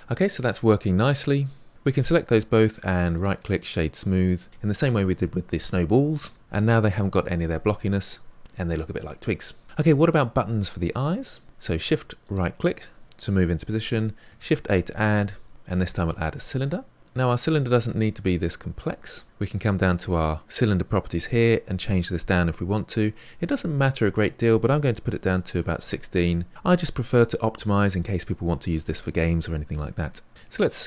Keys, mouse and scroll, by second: 2.0 shift+click, 3.1-4.5 right drag, 6.4 click, 12.2 shift+right click, 14.3 shift+a, 19.9-22.1 drag, 24.1-26.5 drag, 30.3 s.